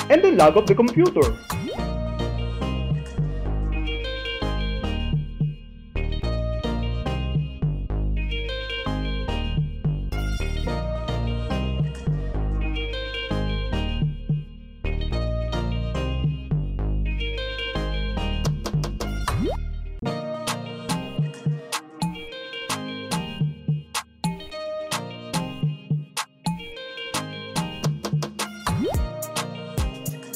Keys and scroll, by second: 2.5 shift+t, 4.5 Left, 5.0 BackSpace, 6.4 BackSpace, 7.7 Left, 9.0 Left, 10.3 Left, 11.4 Left, 12.8 Left, 14.3 Left, 16.2 Left, 17.3 Left, 18.9 Left, 20.9 alt+f, 27.1 Return.